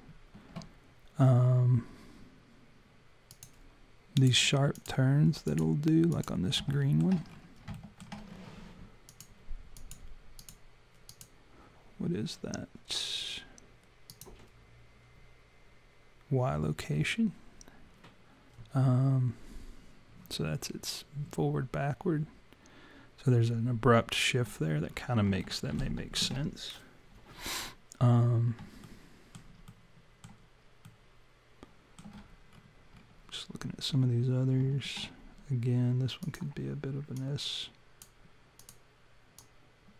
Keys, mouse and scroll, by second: 3.3 click, 4.2 click, 4.8 click, 5.4 click, 6.1 click, 6.7 alt+middle click, 7.3-8.5 scroll up 6, 7.8 alt+middle click, 9.1 click, 9.8 click, 10.4 click, 11.1 click, 14.1 click, 24.9-25.9 scroll down 4, 25.4 alt+middle click, 28.9 alt+middle click, 29.7 alt+middle click, 32.5-33.2 scroll up 7, 36.2 click, 37.2 click, 38.6 click, 39.4 click.